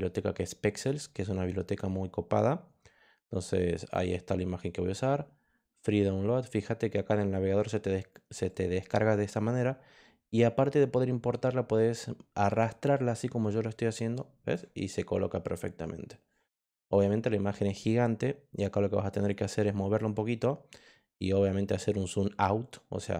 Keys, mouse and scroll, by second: 3.5 click, 8.4-14.5 drag, 18.5 click, 19.6 click, 21.6 scroll up 2, 21.9 scroll down 2, 22.9 click.